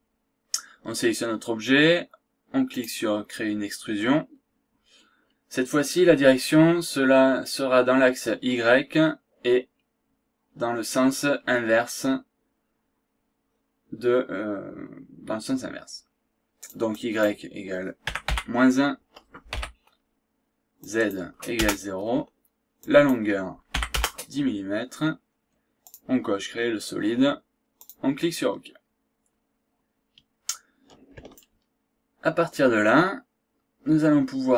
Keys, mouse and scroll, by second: 2.7 click, 9.6-10.0 scroll down 1, 10.1 scroll up 1, 10.4 scroll down 1, 10.7-11.1 scroll up 1, 11.4 scroll up 1, 11.8 scroll down 1, 16.9 click, 18.0 KP_Subtract, 18.5 KP_1, 19.6 ,, 20.8 click, 21.6 KP_0, 22.8 click, 23.9 KP_0, 24.5 KP_1, 25.8 click, 27.8 click, 28.5 scroll down 2, 28.8 scroll up 2, 31.4-34.5 shift+right drag.